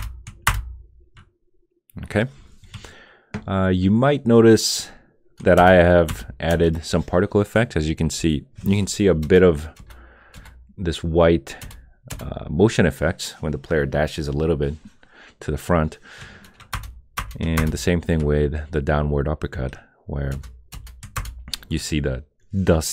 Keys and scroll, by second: 0.5 Return, 5.6 Return, 6.1 Return, 9.2 Return, 9.7 Return, 10.3 Return, 11.6 Return, 12.1 Return, 16.7 Return, 17.6 Return, 20.3 Return, 21.1 Return.